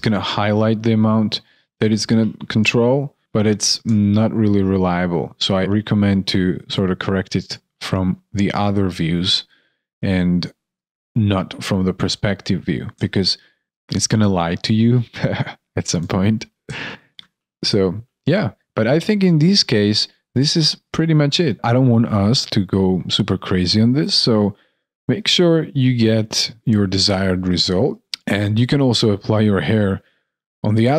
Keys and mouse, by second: 2.6 shift+click, 3.2 alt+shift+click, 4.4 alt+click, 13.2 alt+click, 15.9 alt+click, 16.6 alt+click, 16.8 alt+right click, 17.6 alt+right click, 17.9 alt+middle click, 18.5 alt+right click.